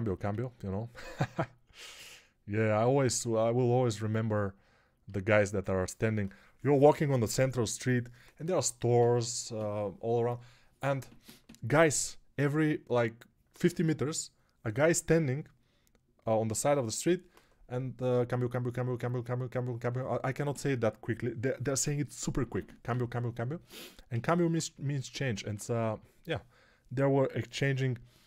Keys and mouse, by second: 24.0-25.8 typing.